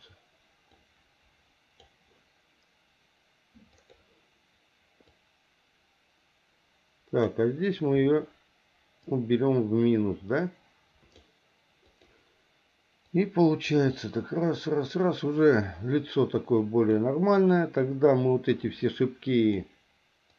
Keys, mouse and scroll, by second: 0.8-1.8 drag, 3.8 click, 5.1-7.3 drag, 9.0-11.1 drag, 11.9 click, 13.1 click, 13.9-17.0 drag, 18.6 click.